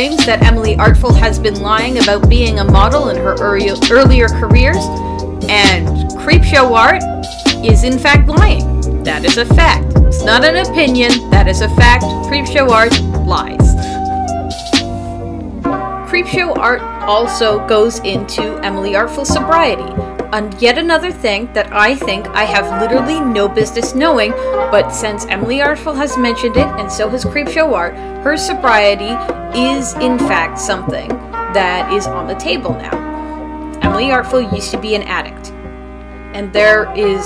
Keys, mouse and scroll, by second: 0.8 space, 1.3 space, 1.6 space, 6.4 space, 21.6 space.